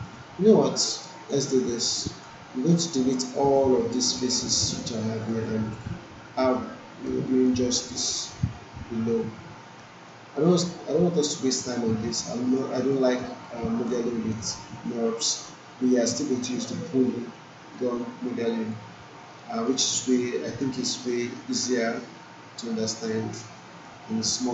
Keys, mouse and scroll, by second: 1.0 alt+right click, 1.5 alt+middle click, 1.9 alt+right click, 3.1-4.3 alt+drag, 4.4 alt+middle click, 5.0-5.3 alt+right click, 5.4-6.0 alt+drag, 7.2 alt+middle click, 10.0-12.5 alt+drag, 12.9 alt+middle click, 13.4-14.0 alt+right click, 14.1 alt+middle click, 15.7-16.3 alt+drag, 17.7-18.9 alt+drag, 19.3 alt+middle click, 19.9-20.8 alt+right click, 21.0-21.6 alt+middle click, 22.0-23.2 alt+drag, 23.4-24.0 alt+middle click, 24.4-24.5 alt+drag.